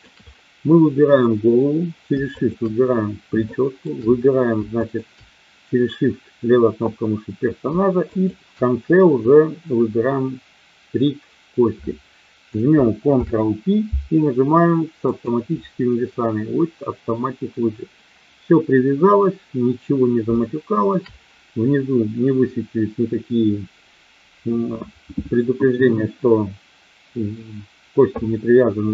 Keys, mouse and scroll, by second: 2.3 shift+click, 3.3-3.8 shift+middle drag, 4.8 shift+click, 8.0 shift+click, 13.1 ctrl+p, 20.3-21.0 shift+middle drag.